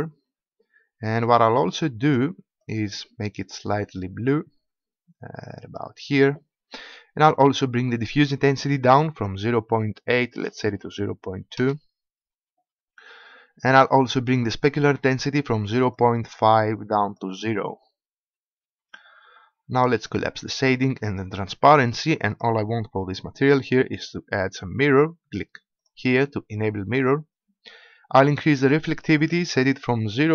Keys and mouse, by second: 8.1-9.7 drag, 9.7-11.5 middle drag, 15.9-24.1 drag, 25.7-30.3 drag.